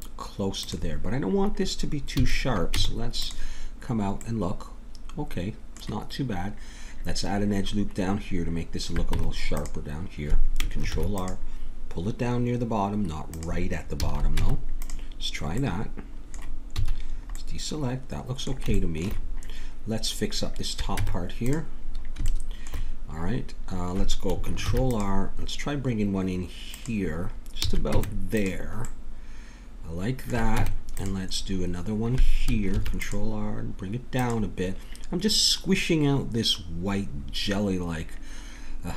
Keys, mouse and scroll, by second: 2.2 a, 2.7 Tab, 4.2 middle click, 9.1 Tab, 10.9 ctrl+r, 13.9 a, 14.4 Tab, 15.7 middle click, 15.9 click, 16.7 a, 20.9 Tab, 24.6 ctrl+r, 27.6 a, 27.9 Tab, 28.8 middle click, 30.5 Tab, 32.7 ctrl+r, 37.2-38.9 middle drag.